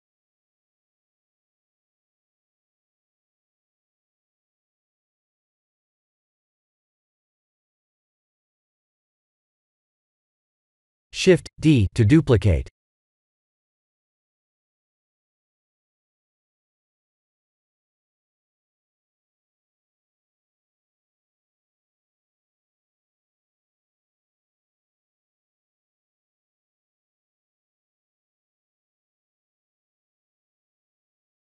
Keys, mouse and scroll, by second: 1.2 middle click, 2.5 click, 4.3 g, 5.6 ctrl+z, 6.2 shift+click, 7.6 ctrl+j, 8.2 click, 8.5 g, 9.6 ctrl+z, 10.5 KP_1, 10.8 KP_7, 11.8-12.1 scroll down 4, 12.1 shift+middle click, 13.7 shift+d, 17.1 shift+d, 19.8 shift+click, 20.9 shift+click, 20.9 shift+d, 23.3 middle click, 24.0 shift+middle click, 24.6 middle click, 25.4 click, 29.1 click, 30.7 click.